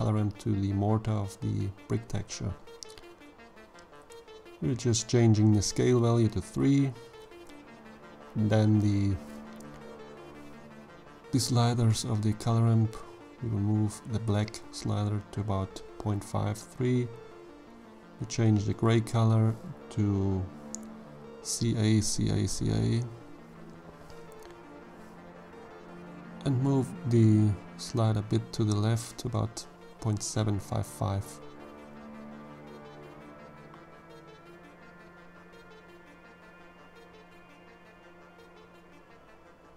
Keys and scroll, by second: 5.0 3, 5.6 Return, 20.8-22.1 typing, 22.4 Return.